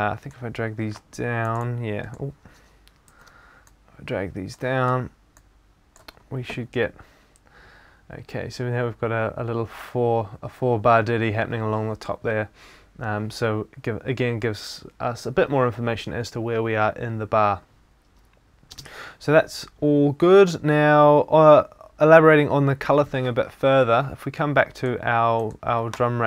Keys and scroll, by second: 3.1 super+z.